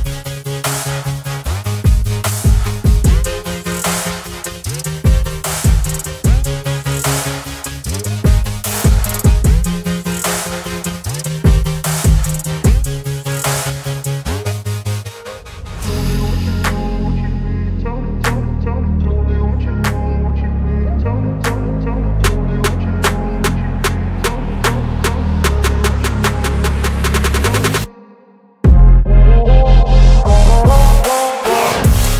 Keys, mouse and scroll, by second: 0.4 shift+click, 1.7 ctrl+g, 2.8 ctrl+z, 3.5 ctrl+z, 3.5 click, 8.5 right click, 10.5 click, 11.2 right click, 12.2 click, 16.6 ctrl+t, 18.4-19.9 drag, 21.2-21.8 click, 28.9 click, 28.9 click, 30.1 right click, 31.1-32.1 drag.